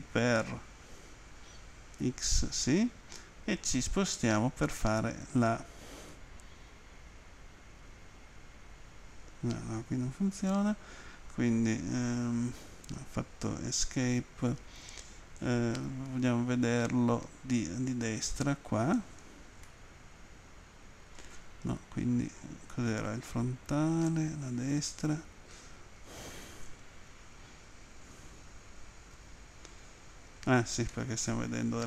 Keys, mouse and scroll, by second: 2.0 x, 8.4 Page_Down, 10.3 Escape, 13.9 Escape, 16.3 End, 19.7 middle click, 22.2 End, 24.2 Page_Down, 27.1 End, 30.9 middle click.